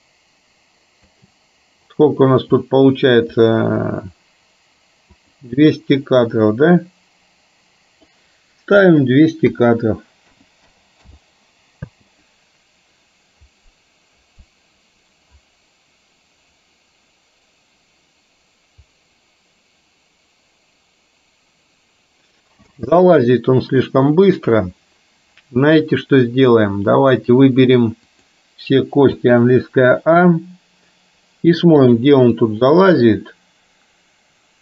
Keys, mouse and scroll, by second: 1.1 space, 5.2 click, 6.3-8.2 drag, 8.8-11.3 drag, 12.0 space, 22.8 space, 24.2 middle click, 25.8 middle click, 28.2 click, 29.2 a, 32.0 click, 32.5-34.6 drag.